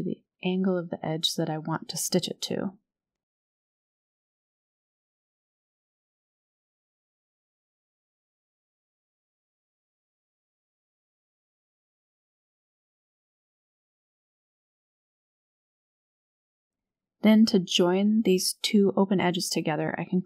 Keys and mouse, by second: 2.0 s, 6.7 g, 10.3 r, 12.3 g, 15.5 g, 18.0 2, 18.9 alt+click, 19.8 alt+shift+click.